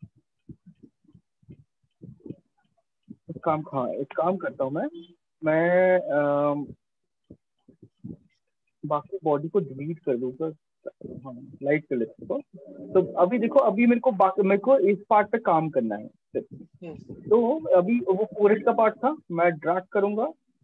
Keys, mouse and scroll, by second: 1.0 click, 7.1 alt+click, 7.9 right click, 10.7 right click, 11.7 right click.